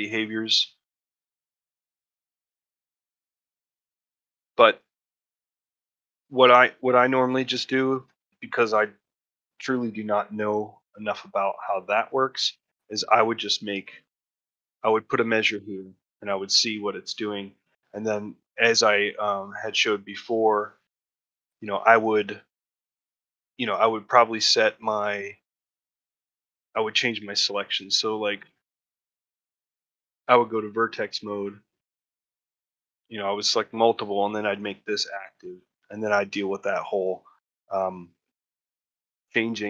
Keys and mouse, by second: 1.8-2.7 drag, 3.8-4.8 drag, 6.0 click, 7.3 shift+middle click, 8.0 shift+middle click, 10.5 middle click, 11.1 middle click, 11.5 shift+middle click, 11.9 middle click, 12.4 shift+middle click, 12.7 middle click, 13.7 shift+middle click, 14.0 ctrl+middle click, 14.4 shift+middle click, 17.1 middle click, 17.6 middle click, 18.0 shift+middle click, 23.4 middle click, 23.8 shift+middle click, 24.1 middle click, 24.9 middle click, 26.2 Tab, 27.0 Tab, 30.8 middle click, 31.3 shift+middle click, 32.0 shift+click, 33.2 middle click, 33.6 shift+middle click, 34.3 shift+click, 34.7 middle click, 35.1 shift+middle click, 35.7 middle click.